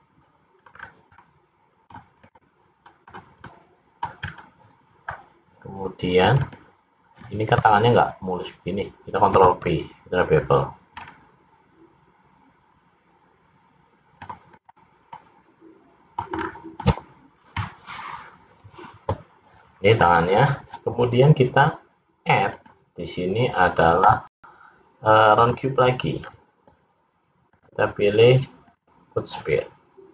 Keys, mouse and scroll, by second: 0.8 middle click, 1.0-1.4 scroll down 2, 1.4 middle click, 2.4 click, 3.0 middle click, 3.6 middle click, 4.4-4.8 scroll up 3, 5.2-5.6 scroll down 2, 6.3 click, 6.7 click, 9.5 ctrl+b, 14.6 click, 15.2 middle click, 16.4 scroll down 3, 16.9 middle click, 20.1-22.6 scroll up 2, 22.6 click, 22.6-23.2 scroll up 1, 26.2-26.6 scroll down 3, 27.5 click.